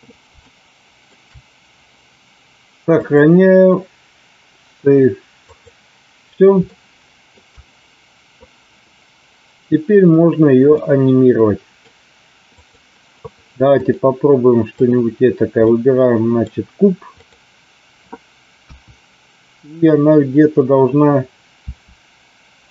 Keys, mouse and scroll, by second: 0.4 shift+middle click, 2.9-5.8 drag, 6.7-7.3 shift+middle drag, 10.8-11.8 middle drag, 12.4 click, 13.7-14.9 drag, 15.7 middle click, 18.6 KP_1, 21.6 r.